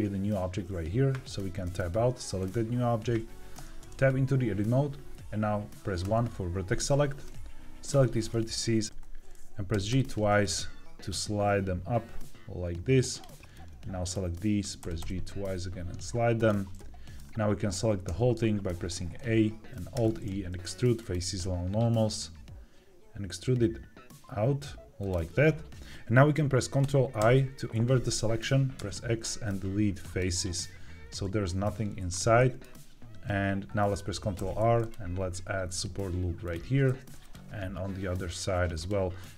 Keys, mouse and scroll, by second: 1.2 Tab, 2.3 click, 3.5 Tab, 5.9 1, 7.1 click, 8.2 middle click, 8.8 Escape, 8.8 g, 9.6 g, 9.8 g, 13.0-14.0 drag, 14.7 g, 14.9 g, 16.3 click, 16.6-18.0 middle drag, 18.0 a, 19.8 alt+e, 24.9 click, 27.1 ctrl+i, 28.7 x, 32.3-33.6 middle drag, 34.3 ctrl+r, 36.3 click, 36.8 ctrl+r, 38.6 click.